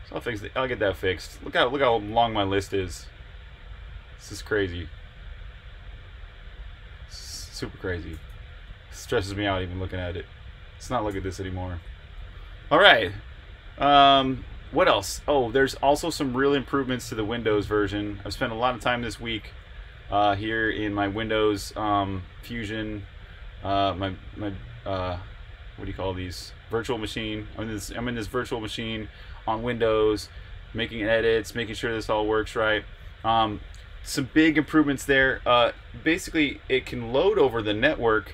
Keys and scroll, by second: 1.7-3.3 typing, 9.5 j, 10.8-11.8 typing, 17.2 super+Tab.